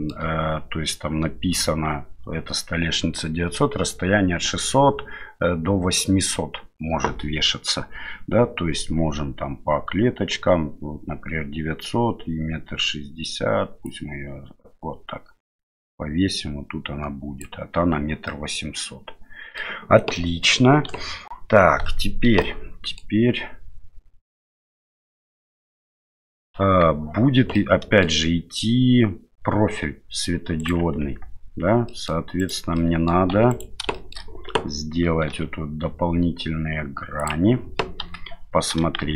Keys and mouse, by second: 13.9-17.4 drag, 18.3-19.6 middle drag, 20.2 middle click, 20.9 KP_7, 22.5 middle click, 26.3 middle click, 26.6 KP_1, 27.5 middle click, 30.6 right click, 31.0 Tab, 31.8 middle click, 32.4 right click, 32.7 middle click, 33.3 3, 33.5 right click, 33.9 shift+middle click, 35.3 i, 38.0 KP_7, 39.0 shift+z.